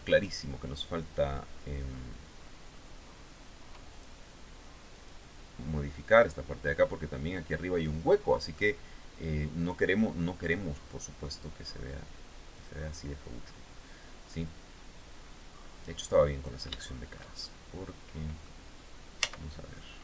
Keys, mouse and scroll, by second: 3.4 click, 4.5 click, 5.8 middle click, 7.5-7.8 scroll up 2, 8.1-10.2 middle drag, 12.0 click, 15.8 click, 16.3 shift+middle click, 17.0-18.2 shift+middle drag, 18.7 z, 19.2-20.0 scroll up 1.